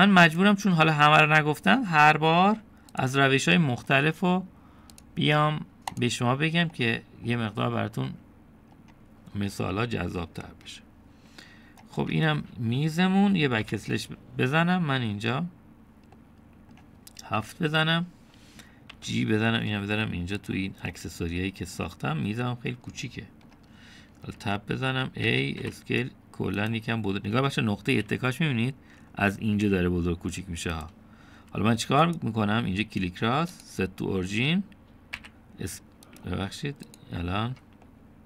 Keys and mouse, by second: 0.2 middle click, 1.4 click, 1.9-3.1 middle drag, 4.0 shift+click, 4.6 middle click, 6.0-7.0 right drag, 7.9 middle click, 9.1 click, 13.0 Tab, 14.7 /, 17.2-17.8 middle drag, 18.4 KP_7, 20.0 g, 22.0-22.8 middle drag, 24.1-24.5 shift+middle drag, 25.2 Tab, 26.3 a, 26.7 s, 30.7 s, 32.5 Tab, 33.1-33.8 right drag, 36.2 s, 37.9 click.